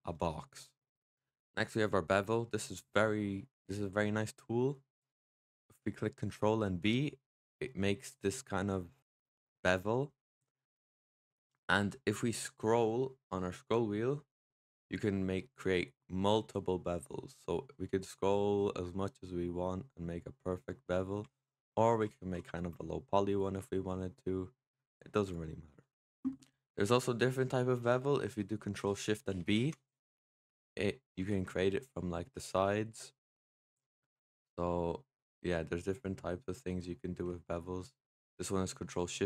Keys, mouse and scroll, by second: 4.6-6.5 scroll up 2, 4.8 middle click, 6.5 ctrl+b, 25.8 ctrl+z, 29.4 ctrl+shift+b.